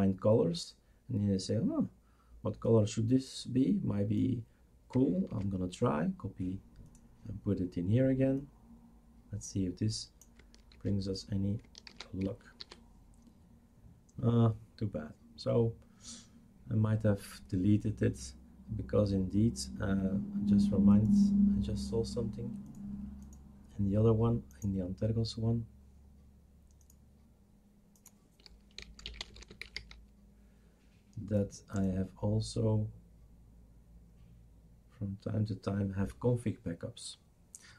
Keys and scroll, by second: 5.3 ctrl+c, 10.7 ctrl+v, 11.9 ctrl+s, 13.4 shift+super+r, 28.6-30.2 typing.